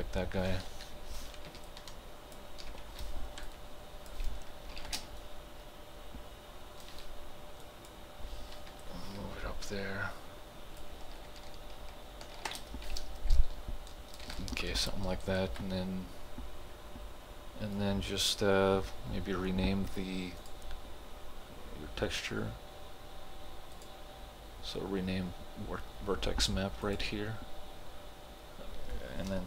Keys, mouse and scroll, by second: 1.0 t, 1.7-3.5 ctrl+drag, 3.5-4.8 alt+drag, 4.8 ctrl+g, 5.0 space, 5.2-7.6 right drag, 7.6 click, 8.7 t, 8.8-12.4 drag, 12.4 ctrl+g, 12.6 space, 13.4 alt+click, 14.4-20.4 ctrl+alt+drag, 23.8 click, 26.9 click.